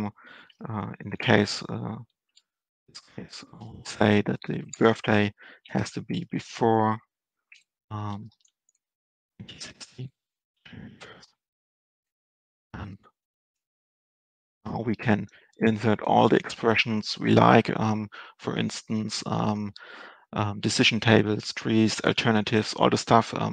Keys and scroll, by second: 3.7 ctrl+space, 9.7 Right, 12.4 Down, 13.3 Left, 13.5 Return.